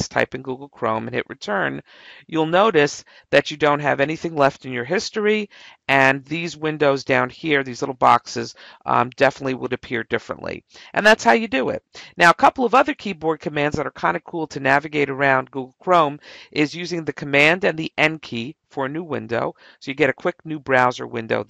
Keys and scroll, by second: 0.5 Return.